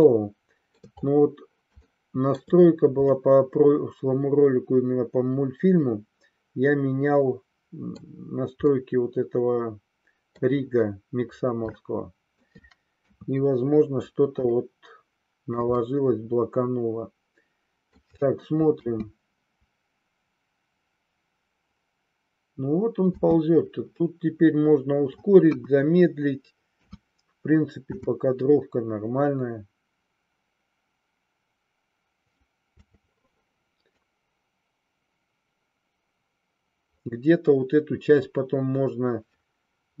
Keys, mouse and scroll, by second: 0.0-0.8 shift+middle drag, 1.8-2.5 shift+middle drag, 3.1-7.9 middle drag, 8.7-10.3 middle drag, 11.7-12.5 shift+middle drag, 12.9 KP_3, 14.4-15.6 shift+middle drag, 15.8-17.9 middle drag, 18.7 space, 23.1 space, 23.9-25.1 middle drag, 25.3 KP_1, 26.7 KP_3, 27.7 space, 32.8 space, 33.8-40.0 drag.